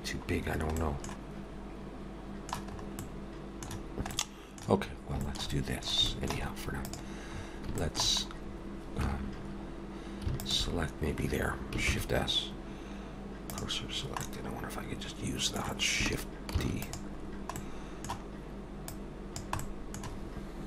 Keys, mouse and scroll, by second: 0.8 middle click, 1.4 alt+s.